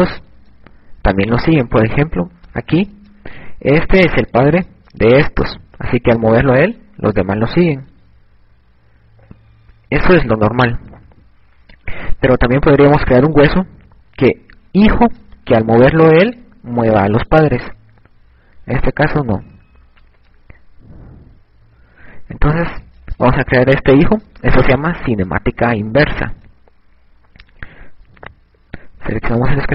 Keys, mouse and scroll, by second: 1.0 right click, 7.7 click, 10.7 ctrl+z, 11.5 a, 17.7 right click, 18.3 g, 23.0 a.